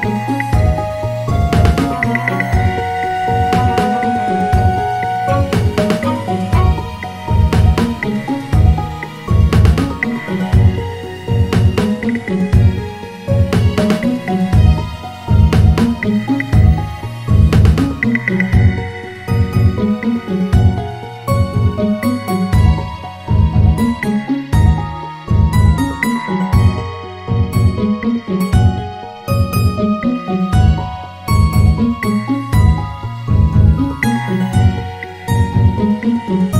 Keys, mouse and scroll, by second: 2.1 click, 2.8 alt+shift+click, 4.1 e, 6.5 e, 10.8 m, 15.7 click, 17.6 KP_Add, 18.1 KP_Add, 20.3 s, 25.1 Tab, 27.5-28.8 scroll down 1, 28.8 click, 30.5 click, 32.2 click, 33.0 Tab, 34.3-36.5 scroll up 5.